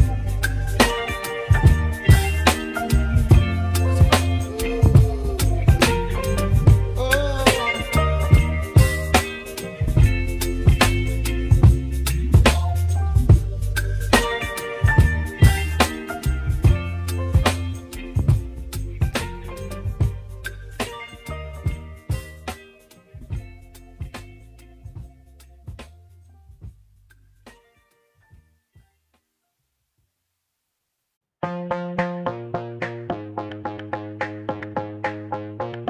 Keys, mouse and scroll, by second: 0.2 i, 8.8 i, 12.4 e, 15.0 s, 22.1-22.6 scroll up 1, 22.6-23.2 scroll up 6, 23.2-23.7 scroll down 1, 23.7-24.7 middle drag, 24.7-25.3 scroll down 2, 25.3-27.5 middle drag, 27.5-28.2 scroll down 2, 29.2 click, 29.6-30.1 scroll down 1, 30.1-31.4 middle drag, 31.4-32.1 scroll down 2, 33.8 middle click, 35.2-35.6 scroll up 4, 35.6-35.8 shift+middle drag.